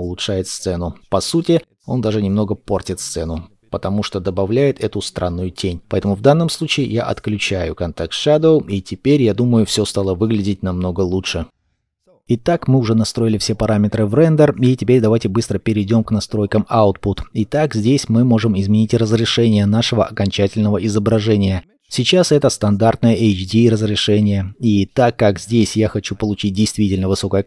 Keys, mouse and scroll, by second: 18.2-18.6 scroll up 1.